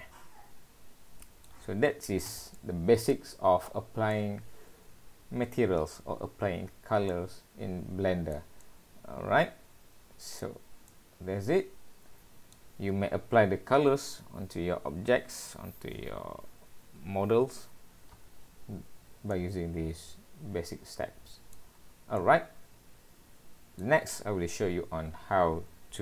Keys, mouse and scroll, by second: 1.7 scroll down 2, 2.5 middle click, 3.7 middle click, 7.1 middle click, 8.6 middle click, 10.9 middle click, 19.3 middle click, 21.8 scroll down 2, 22.2 middle click.